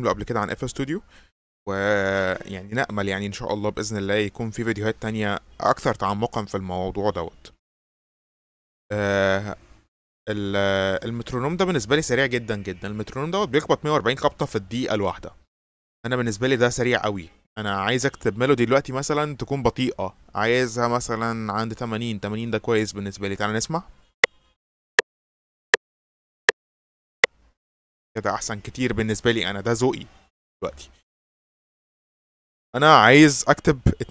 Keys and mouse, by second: 8.6 click, 11.6 click, 17.1-21.7 drag, 24.2 click, 27.7 click.